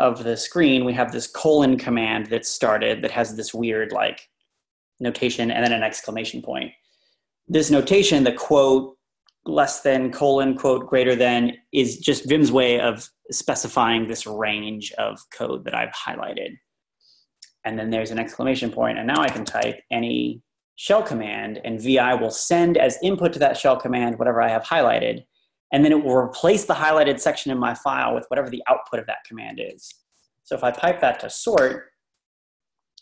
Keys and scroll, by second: 18.9-20.1 typing, 31.6 Return.